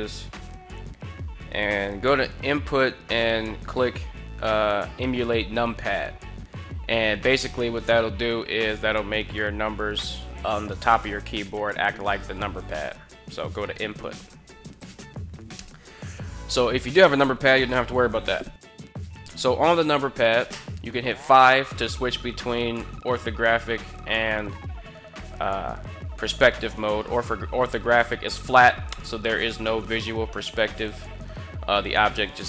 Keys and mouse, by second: 20.9 KP_5, 22.5 KP_5, 23.2 KP_5.